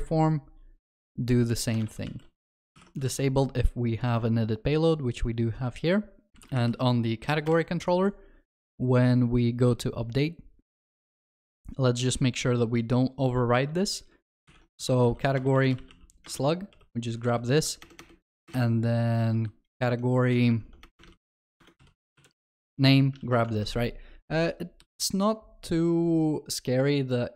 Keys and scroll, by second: 1.9 ctrl+v, 2.7 ctrl+s, 2.7 ctrl+y, 3.0 ctrl+s, 6.3 ctrl+shift+n, 15.4 Return, 19.0 ctrl+BackSpace, 21.6 Return, 23.2 ctrl+alt+shift+l, 23.5 ctrl+s, 24.8 ctrl+b.